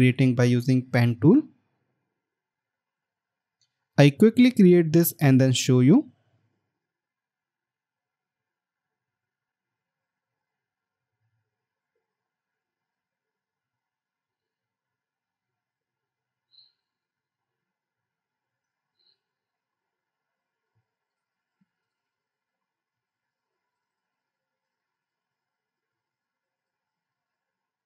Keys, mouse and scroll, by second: 9.7 scroll down 1, 12.7 Escape, 12.9 scroll up 1, 17.7 right click, 19.6 alt+scroll up 1, 24.3 alt+scroll up 1, 24.5 alt+scroll down 1.